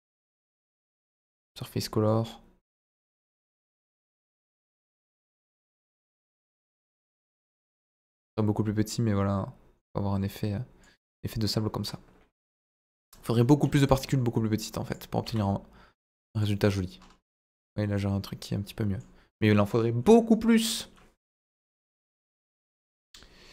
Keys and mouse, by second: 1.3 click, 3.6 middle click, 5.5 right click, 7.7 middle click, 8.9-10.8 drag, 11.5-12.7 middle drag, 13.6-14.0 middle drag, 15.2 s, 16.4 drag, 18.0-19.0 middle drag.